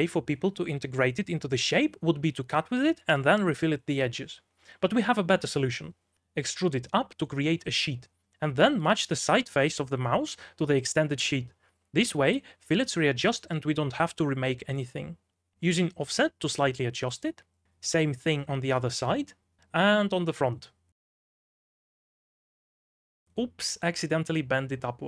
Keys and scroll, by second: 2.5-5.0 typing, 5.7 ctrl+z, 6.3 2, 6.6 e, 8.0 b, 9.4 3, 10.4 v, 14.3-16.6 typing, 18.4-24.0 typing.